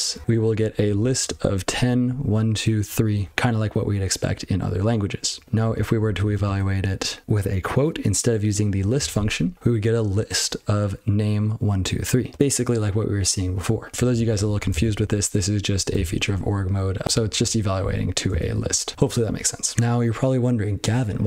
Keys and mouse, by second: 0.2 ctrl+c, 0.3 ctrl+n, 0.5 ctrl+n, 0.7 ctrl+n, 0.9 ctrl+n, 1.1 ctrl+a, 1.4 ctrl+f, 1.6 ctrl+f, 1.8 ctrl+f, 2.0 ctrl+f, 2.5 ctrl+f, 2.8 ctrl+f, 5.7 ctrl+n, 5.9 ctrl+n, 6.0 ctrl+n, 6.2 ctrl+n, 6.4 ctrl+l, 9.1 ctrl+c, 13.9 ctrl+n, 14.1 ctrl+n, 14.3 ctrl+n, 14.5 ctrl+a, 14.7 ctrl+space, 14.8 ctrl+n, 15.0 ctrl+g, 15.1-15.5 ctrl+p, 15.7 ctrl+p, 15.9 ctrl+space, 16.0 ctrl+n, 16.2 ctrl+g, 16.3 ctrl+p, 17.0 ctrl+b, 17.3 ctrl+d, 17.8 ctrl+a, 18.3 ctrl+space, 18.4 ctrl+n, 18.6 ctrl+w, 18.9 ctrl+/, 19.1 ctrl+/, 19.2 ctrl+/.